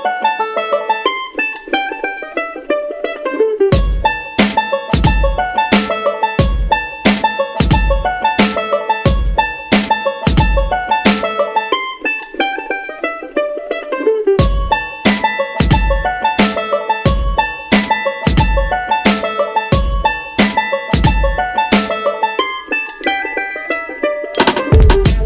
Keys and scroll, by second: 15.1 space, 22.3 space.